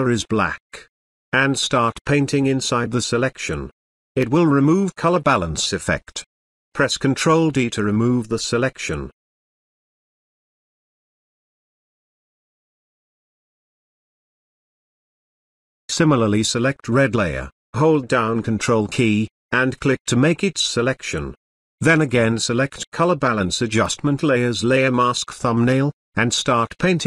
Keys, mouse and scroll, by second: 9.1 ctrl+d, 9.6 space, 10.2-12.1 ctrl+drag, 13.2-15.4 ctrl+drag, 18.8 ctrl+click.